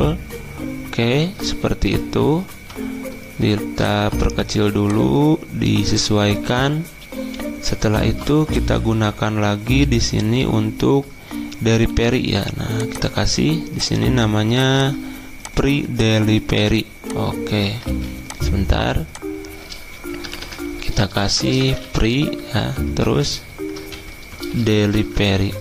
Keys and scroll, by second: 2.5 v, 11.8 t, 17.8 ctrl+z, 20.2-22.3 typing, 24.3 shift+Right.